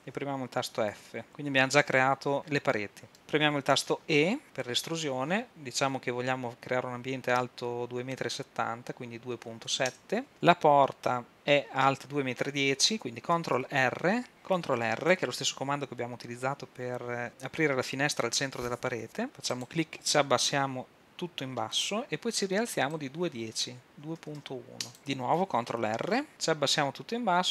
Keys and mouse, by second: 1.0 f, 3.8 e, 11.3 Tab, 13.5 ctrl+r, 14.3 Tab, 15.0 ctrl+r, 21.9-24.8 drag, 26.0 ctrl+r.